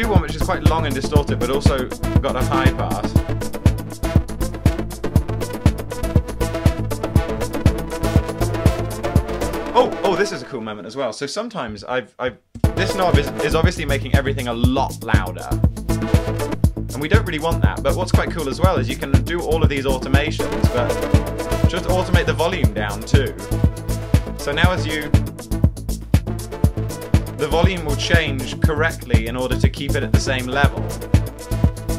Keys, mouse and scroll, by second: 0.2 double click, 0.8 double click, 1.8 double click, 3.6 double click, 6.0 double click, 31.1 shift+click.